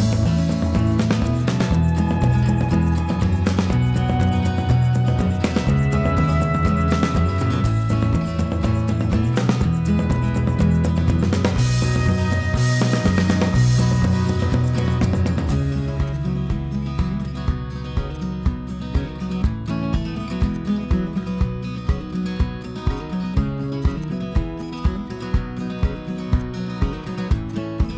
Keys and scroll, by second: 13.2 Escape, 19.2 Escape, 20.1 ctrl+a, 22.3 ctrl+h.